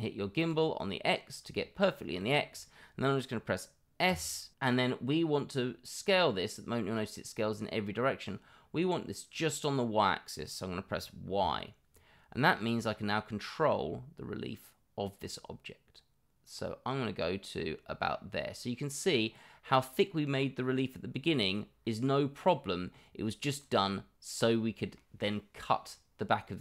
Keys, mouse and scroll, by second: 0.3 click, 1.5 middle drag, 2.1-2.5 middle drag, 20.2-22.9 middle drag, 23.5 click, 23.8-24.9 middle drag, 25.3-25.6 middle drag, 26.4-26.6 middle drag.